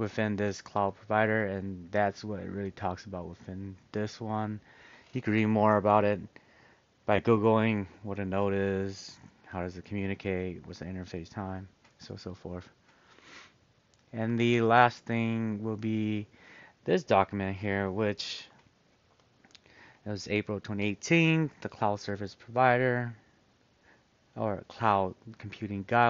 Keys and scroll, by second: 18.3 super+-.